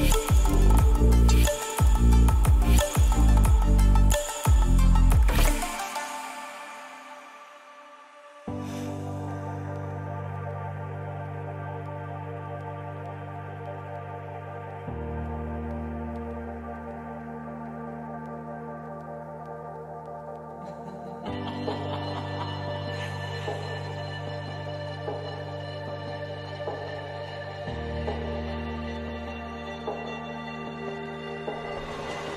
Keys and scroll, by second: 4.5 ctrl+=, 28.2 ], 30.8 ctrl+[, 31.3 ctrl+=.